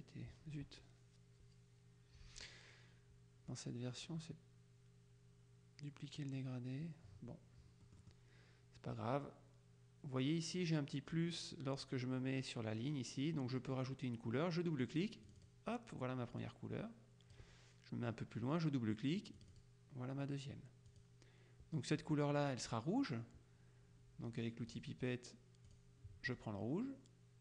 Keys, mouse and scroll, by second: 7.9 middle click, 15.3 click, 16.5 click, 19.4 click, 21.0 click, 24.8 click, 25.8 click.